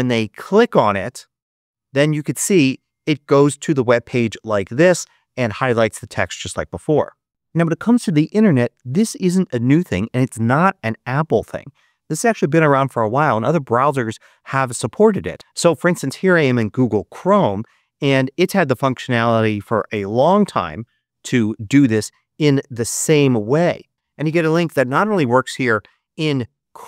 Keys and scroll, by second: 24.6 super+v, 25.4 super+Return.